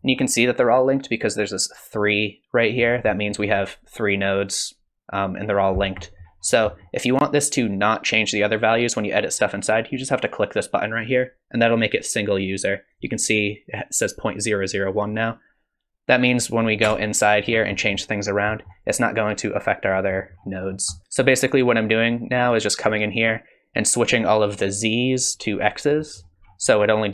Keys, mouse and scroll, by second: 2.9 scroll down 5, 3.1 middle click, 3.5-5.3 scroll down 1, 5.3-5.8 scroll down 1, 5.8-6.7 scroll up 7, 6.0 middle click, 6.7 middle click, 11.0 click, 12.9 click, 16.3 click, 16.8 Tab, 17.4-18.0 scroll down 5, 17.7 middle click, 18.5 middle click, 20.0 middle click, 20.3 scroll down 2, 20.6-21.0 scroll up 3, 20.9 middle click, 23.7 click, 26.0 middle click, 26.4-26.8 scroll down 4.